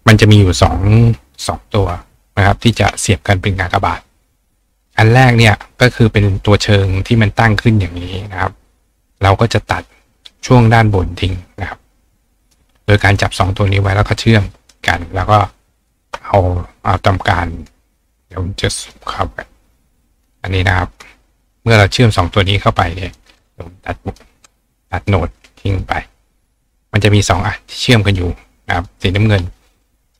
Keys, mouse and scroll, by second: 0.1-2.0 drag, 2.8-3.1 ctrl+drag, 3.3 drag, 3.6-6.8 drag, 7.2-9.9 right drag, 9.9-11.5 drag, 12.5 click, 14.2 click, 15.8 shift+click, 16.2-17.6 drag, 17.7 click, 18.9-20.2 drag, 20.3 click, 21.0-21.6 drag, 21.7-23.1 drag, 23.2-23.9 drag, 24.2 click, 25.1-25.7 drag, 25.8-27.1 drag, 27.2-28.8 drag, 28.9-30.1 drag.